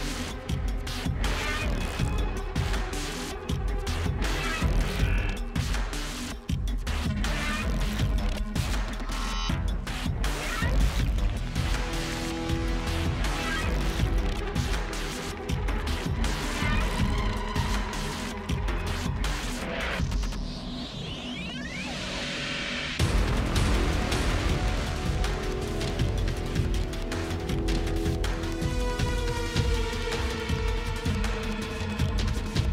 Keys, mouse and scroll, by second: 0.6 space, 3.9-5.3 scroll, 5.3 scroll, 5.4 click, 5.8 click, 7.6 click, 8.2-10.0 typing, 11.2 click, 11.3-13.1 typing, 13.5 click, 13.8 click, 15.1 click, 15.2 click, 16.8 click, 18.0 click, 18.6 click, 18.9 Delete, 21.7 click, 23.4 click, 28.5 click, 29.4 click, 30.8-31.3 typing.